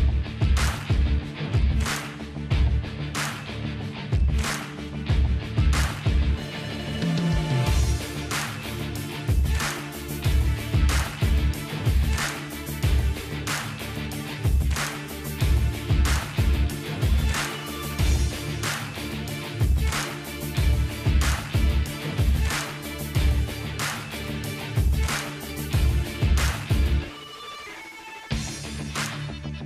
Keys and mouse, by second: 0.3 ctrl+z, 0.8-3.4 drag, 3.1 ctrl+b, 3.4 middle click, 4.6-5.6 middle drag, 4.9 ctrl+z, 5.1 ctrl+z, 5.6 ctrl+z, 5.9-6.9 middle drag, 7.6 middle click, 8.0-10.1 drag, 9.3-10.3 middle drag, 10.7 click, 12.2 ctrl+b, 15.4-20.1 drag, 17.8 ctrl+z, 18.0 ctrl+z, 20.0 alt+h, 20.3 click, 21.2-22.4 middle drag, 21.9 alt+v, 22.5-23.6 drag, 23.3 KP_0, 24.1 z, 24.9-28.4 middle drag, 27.9-29.6 drag, 28.4 Tab.